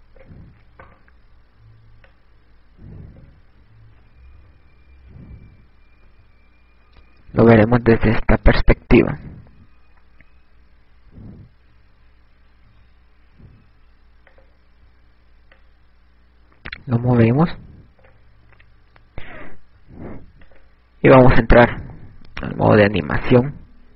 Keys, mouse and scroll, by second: 1.2 right click, 3.6 click, 5.0 a, 5.7 KP_3, 5.9 KP_4, 7.4 KP_1, 13.0 a, 15.7 click, 16.1 click, 21.9 click.